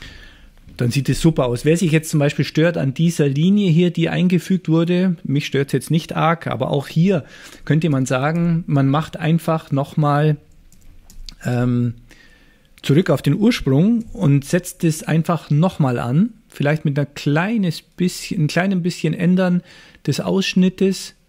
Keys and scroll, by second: 7.6 super+z, 8.0 super+z, 8.4 super+z, 14.1 c.